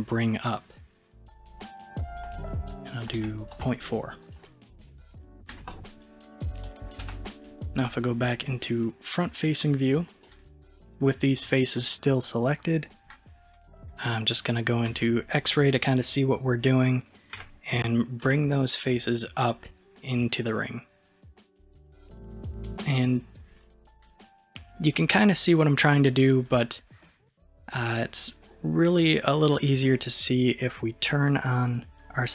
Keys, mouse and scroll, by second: 5.0-7.1 middle drag, 7.1 KP_1, 9.0-10.3 scroll up 1, 10.3-13.3 middle drag, 13.5 KP_1, 14.9 alt+z, 17.4 g, 31.8 click.